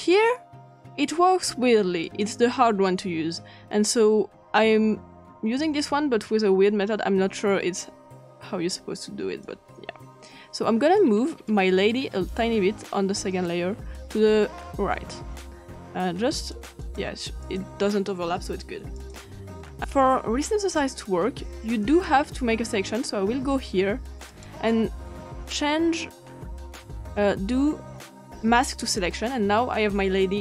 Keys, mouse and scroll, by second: 0.0 click, 2.1 click, 5.8 click, 9.5-11.0 drag, 11.5-13.5 drag, 16.4 click, 16.8 click, 17.4 click, 19.0 click, 21.9 click, 24.3 right click, 28.8 click.